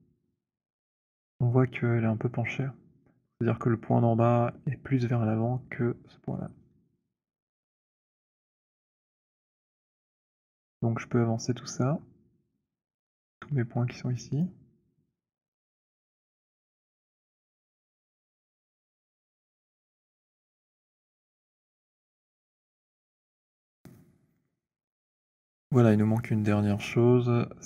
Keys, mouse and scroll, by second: 4.5 click, 8.8 click, 11.7-12.8 scroll, 14.2 click, 20.1 click, 21.6 click.